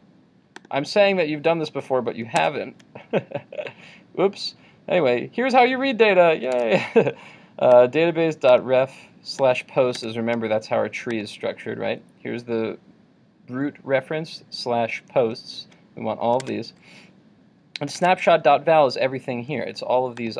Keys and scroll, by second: 2.4 super+Tab, 6.6 super+Tab, 10.0 super+Tab, 16.4 super+Tab.